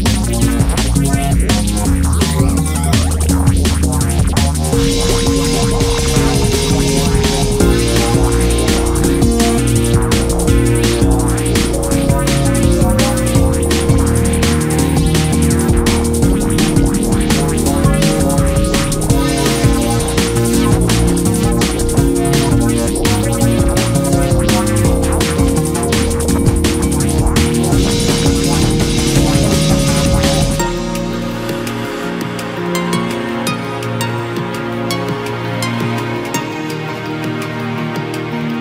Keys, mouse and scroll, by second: 1.0 scroll down 1, 1.1 s, 1.5 s, 2.1 ctrl+z, 2.6-3.6 middle drag, 3.6-4.8 drag, 4.8 s, 5.6 s, 7.3 KP_3, 7.6-7.9 scroll up 2, 7.9 s, 10.4-10.7 scroll down 4, 10.7-12.0 middle drag, 12.0 scroll up 1, 12.1 Tab, 12.3-13.3 middle drag, 13.3-13.8 scroll up 2, 13.8 click, 14.1 Tab, 14.4 middle click, 14.6 scroll up 1, 15.4 i, 16.9 scroll down 1, 17.3 middle click, 18.3 ctrl+r, 20.5 scroll down 2, 20.7 middle click, 21.0-21.7 scroll up 2, 21.7 ctrl+r, 24.4 scroll down 1, 24.6 middle click, 24.8 scroll up 2, 24.9 Tab, 25.6 click, 25.9 middle click, 26.2-26.5 scroll down 2, 26.5 KP_3, 26.9 scroll down 1, 27.1-28.7 middle drag, 28.7 click, 29.0-30.3 middle drag, 30.3 click, 30.6-31.2 scroll up 2, 30.8 middle click, 31.2 Tab, 31.9 3, 32.3-32.7 middle drag, 32.7 click, 32.9 scroll down 1, 33.1-33.8 middle drag, 33.8 KP_1, 34.1-35.2 scroll down 2, 35.2 shift+d, 36.4 p, 36.8 Tab, 37.5 click, 38.0 drag, 38.3 scroll up 2, 38.5 Tab.